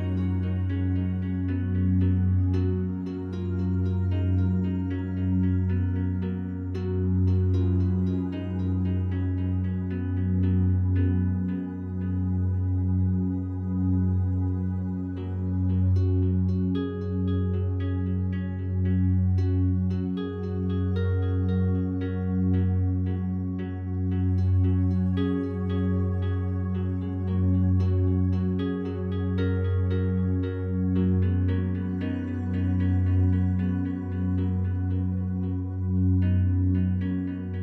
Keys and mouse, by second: 2.8 click, 3.6 click, 5.4 g, 5.6 y, 6.3 click, 7.1-9.0 drag, 9.3 g, 9.7 z, 11.8 click, 12.4 click, 13.6 f, 13.7 click, 13.9 g, 14.5 Escape, 15.4 ctrl+z, 15.7 ctrl+z, 16.9 b, 17.6 Escape, 18.5 alt+a, 18.8 b, 19.1-20.9 drag, 21.6 g, 22.0 z, 23.2 click, 25.0 click, 26.2 click, 28.5 ctrl+alt+click, 29.2 ctrl+alt+click, 32.1-33.1 ctrl+alt+drag, 33.3 click, 34.2 click, 35.4 g, 35.6 y, 36.4 click, 37.4 click.